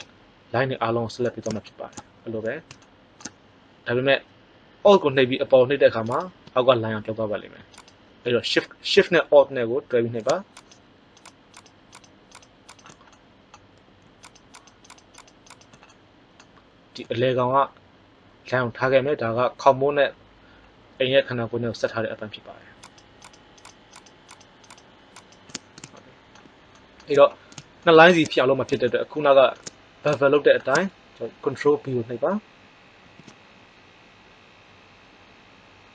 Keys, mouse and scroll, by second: 6.0 right click, 10.6 right click, 13.1 middle click, 32.9 ctrl+b.